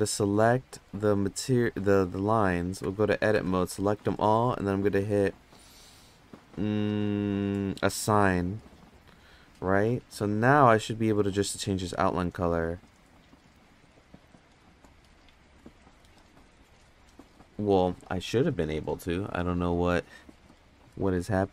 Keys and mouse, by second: 1.8 click, 2.8 Tab, 3.3 a, 8.8 click, 9.0 click, 9.2 click, 10.1 Tab, 11.8 click, 14.7 click.